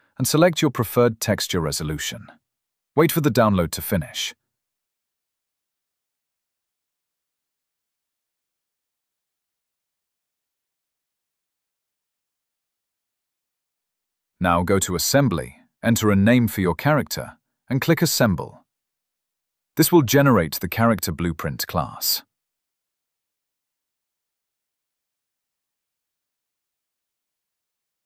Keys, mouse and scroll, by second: 11.6 click, 16.0 click, 20.4 click.